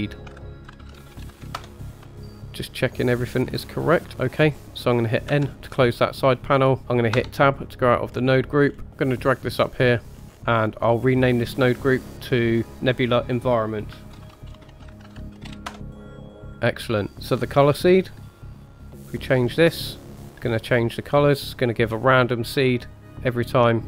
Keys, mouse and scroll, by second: 1.3 e, 1.7 middle click, 1.7 scroll down 5, 1.7 g, 1.8 click, 2.0 g, 2.4 middle click, 3.1-3.4 scroll up 1, 3.4 middle click, 4.1-5.3 scroll down 4, 5.3 n, 6.6 scroll up 1, 6.8 Tab, 7.1 Tab, 8.0-8.8 scroll up 3, 8.8 middle click, 8.8 scroll down 2, 9.0-10.0 drag, 10.1 scroll up 3, 10.9-15.7 drag, 15.8 click, 16.6 click, 17.1 scroll down 3, 17.3-18.2 scroll up 2, 18.2-23.8 drag.